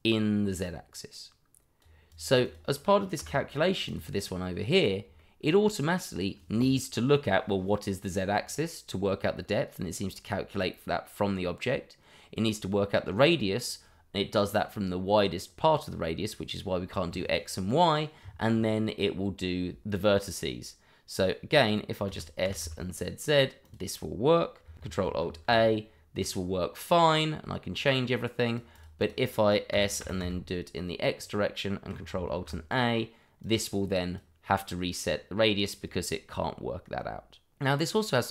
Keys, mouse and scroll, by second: 0.4 click, 2.5 double click, 3.2 Delete, 3.8 click, 5.2 shift+middle click, 11.0 middle click, 22.4 z, 23.6 click, 25.2 ctrl+alt+a, 26.2 click, 29.1 double click, 29.7 s, 30.0 x, 31.2 click, 32.3 ctrl+alt+a, 33.4 click, 34.4 click, 37.5 click, 38.0 middle click.